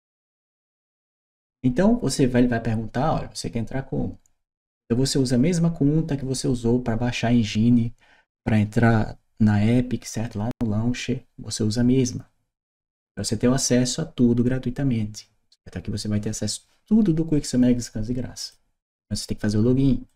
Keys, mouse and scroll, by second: 18.2 click, 19.9 click.